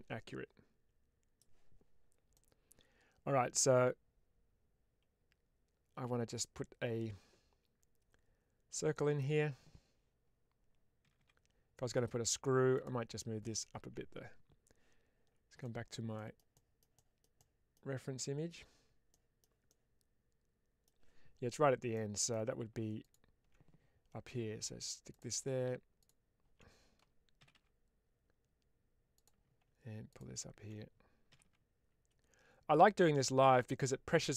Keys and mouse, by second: 2.2-9.1 middle drag, 10.9 g, 11.1 g, 12.6 click, 13.4 click, 21.8 middle click, 22.9 alt+click, 24.2 g, 24.3 g, 25.0 click, 26.0 alt+click, 27.3 g, 27.4 g, 29.0 click, 30.0 click, 31.2 g, 31.3 g, 33.4 click, 33.7 middle click.